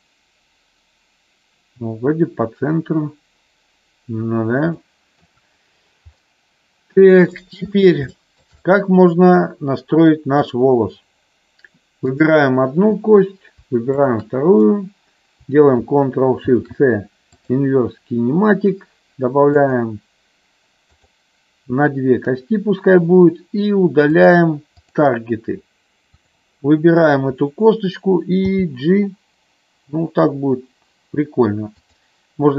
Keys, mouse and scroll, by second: 4.7 shift+middle click, 6.2-7.5 middle drag, 8.1 shift+middle click, 8.7-10.3 middle drag, 12.1 click, 14.0 shift+click, 16.5 ctrl+shift+c, 19.7 click, 20.9 click, 24.2 click, 26.1 click, 28.3 g, 31.7 click.